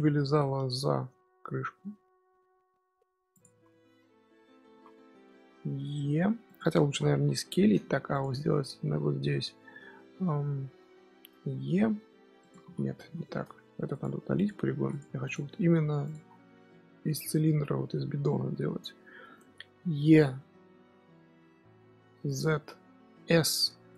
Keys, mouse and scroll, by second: 0.2 z, 1.0 s, 3.4 z, 3.6 scroll up 1, 3.6-4.6 middle drag, 4.6 z, 6.0 e, 6.6 ctrl+z, 6.8 ctrl+z, 7.0 ctrl+z, 7.9 3, 8.0 click, 11.3 e, 12.5 ctrl+z, 12.9 ctrl+z, 13.3 Tab, 13.8 click, 14.3 click, 14.7 x, 15.1 click, 15.5 Tab, 15.8 3, 16.0 click, 16.2-16.5 scroll down 5, 16.5-17.3 scroll up 1, 17.3 middle click, 18.3 scroll down 1, 18.3-19.0 scroll up 1, 19.0 middle click, 19.3-21.2 scroll up 1, 21.2 e, 22.9 s.